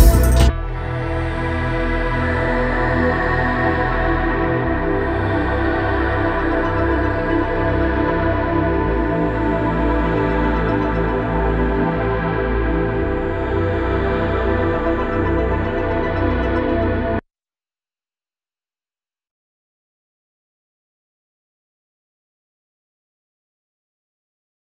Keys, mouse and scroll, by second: 0.1 3, 1.8 5, 3.2-4.7 drag, 4.7 6, 6.0-7.6 drag, 7.6 -, 8.6 5, 11.8 click, 12.5 Down, 20.4 Down.